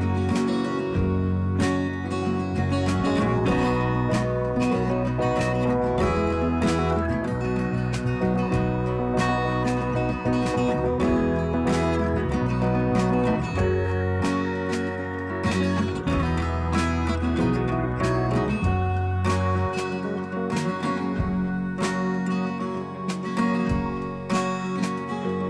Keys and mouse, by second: 0.6 click, 2.4 click, 5.0 alt+click, 6.4 ctrl+z, 7.1 click, 10.7 click, 13.9 click, 15.0 click, 17.0 click, 18.2 click, 19.4 click, 22.6 click, 22.7 click, 24.0 click, 24.2 click, 25.0-25.4 drag.